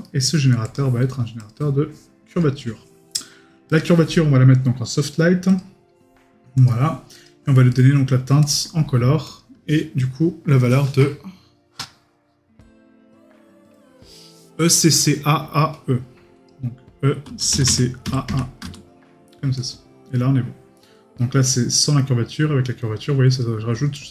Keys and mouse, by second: 0.0 right click, 7.7 right click.